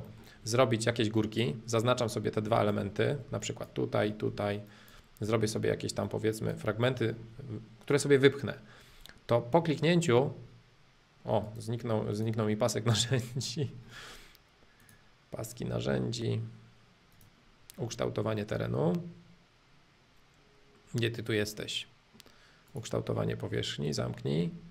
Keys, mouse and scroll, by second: 0.1-1.2 middle drag, 1.2 click, 1.8 middle click, 2.5-4.3 ctrl+drag, 4.0 middle click, 4.7 ctrl+click, 5.3 middle click, 6.0 ctrl+click, 6.8-9.1 middle drag, 11.4 right click, 12.1-14.1 drag, 14.8-16.8 drag, 17.1 click, 17.9-19.9 middle drag, 20.5-22.7 middle drag, 22.7-24.7 drag.